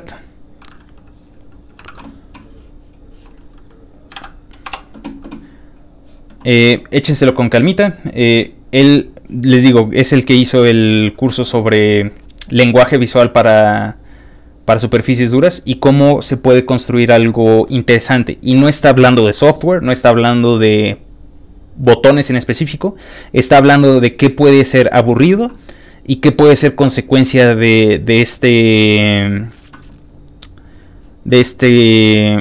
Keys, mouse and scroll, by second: 0.5 click, 1.4 click, 1.9 alt+Tab, 2.9 alt+click, 3.7 click, 3.9 click, 4.2 ctrl+v, 4.7 Return, 5.7 ctrl+click, 6.6 ctrl+click, 7.7 ctrl+click, 8.3 ctrl+click, 9.3 ctrl+click, 9.5 ctrl+click, 13.4 ctrl+click, 14.2 ctrl+click, 15.0 ctrl+click, 16.2 ctrl+click, 18.0 ctrl+click, 23.3 ctrl+click, 23.9 ctrl+click.